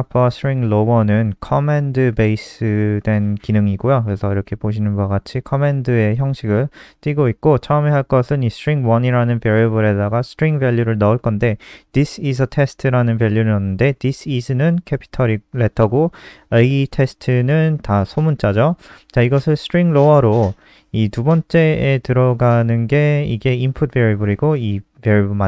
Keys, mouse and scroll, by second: 4.7 click.